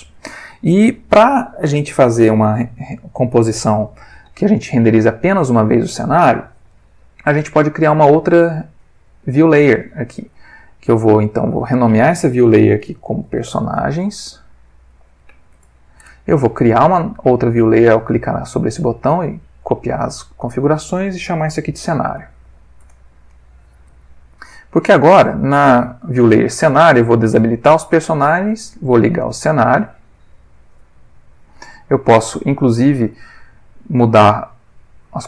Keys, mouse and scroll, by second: 11.2 click, 13.2-15.3 typing, 15.5 Return, 17.3 click, 18.9 click, 20.5 click, 21.3-22.4 typing, 22.8 shift+Return, 27.0 click, 27.9 click, 34.6 click.